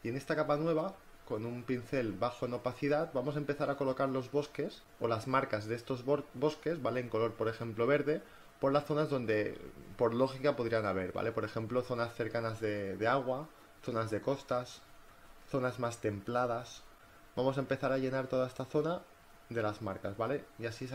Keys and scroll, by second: 3.0 [, 16.2 space.